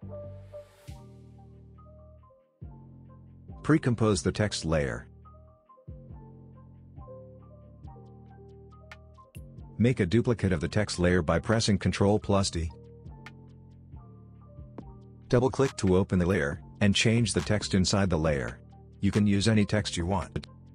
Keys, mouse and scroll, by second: 3.7 right click, 4.6 click, 6.9 BackSpace, 7.8 click, 11.8 ctrl+d, 12.4-15.6 drag, 18.8-20.7 typing.